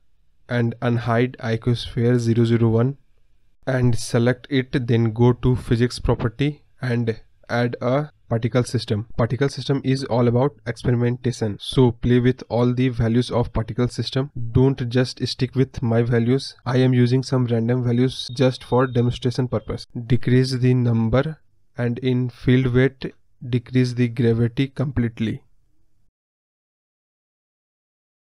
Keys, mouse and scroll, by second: 0.4-1.6 middle drag, 1.6 click, 2.4 scroll down 2, 2.6-5.6 middle drag, 5.6 KP_2, 7.7-22.8 drag, 22.8 KP_0, 26.2 click, 27.0 space, 27.7-28.2 scroll down 14.